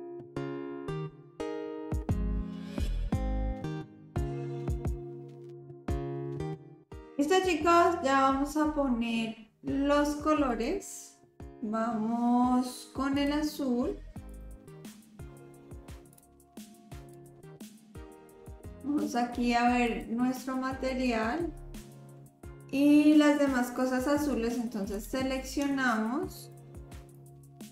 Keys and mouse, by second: 0.2 click, 0.2 middle click, 0.2 right click, 0.5 click, 0.7 click, 1.1 middle click, 1.7 click, 1.9 click, 2.1 middle click, 2.5 click, 3.1 shift+click, 3.4 click, 3.7 click, 3.8 middle click, 4.0 click, 4.2 s, 4.7 middle click, 5.0 middle drag, 5.3 ctrl+s, 10.5 click, 14.3-15.0 drag, 19.9-25.0 drag, 26.3 shift+click, 27.1 shift+click.